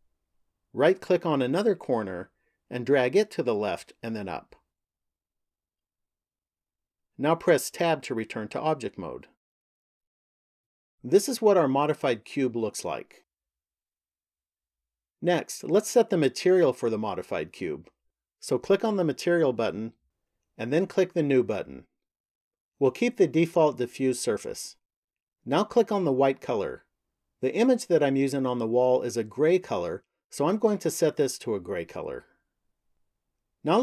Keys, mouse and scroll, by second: 1.6 right click, 3.1 click, 4.9 click, 8.1 Tab, 11.0 middle click, 18.9 click, 20.9 click, 26.6 click.